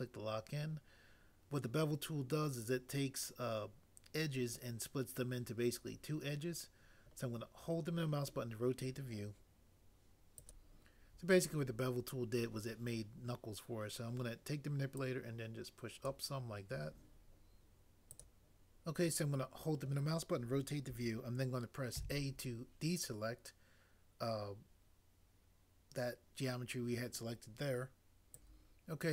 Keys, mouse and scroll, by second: 22.0 a.